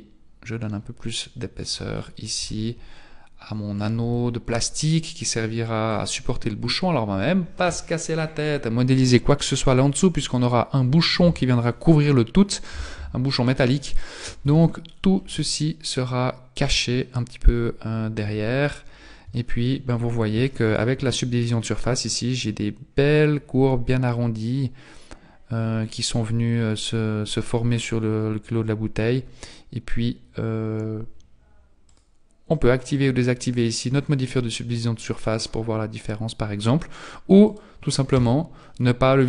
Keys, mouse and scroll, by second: 1.9-2.4 scroll down 6, 2.4 Tab, 2.8-3.4 scroll down 2, 3.4 scroll down 1, 4.0 Tab, 4.8 click, 14.4 Tab, 14.8-15.2 scroll down 6, 15.4 shift+middle click, 18.2 z, 19.3 shift+middle click, 19.8-20.3 scroll up 5, 20.5 shift+middle click, 31.8 click, 32.5 click, 32.9 click, 33.4 click, 33.9 click, 35.0 click, 37.4 click, 38.1 Tab, 38.6 middle click.